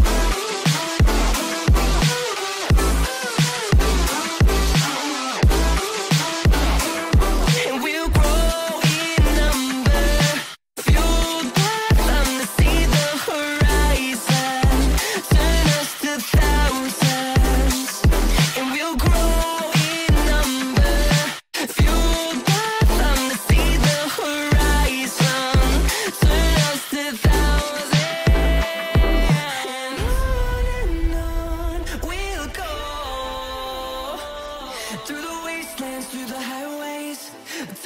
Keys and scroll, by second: 0.2 space, 2.2 Escape, 4.5 F2, 31.9 space.